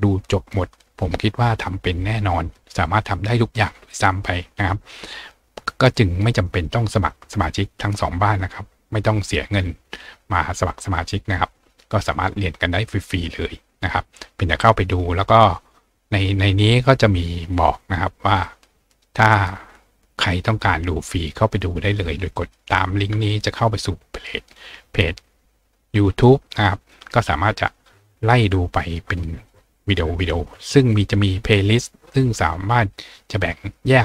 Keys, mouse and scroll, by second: 2.5-3.7 scroll down 2, 6.8-10.2 scroll down 2, 15.6 scroll down 2, 18.4 click, 19.4-19.9 scroll down 2, 22.4 click, 27.8 scroll down 2, 28.5-28.8 scroll down 2, 28.8-29.6 scroll up 2, 31.0 click.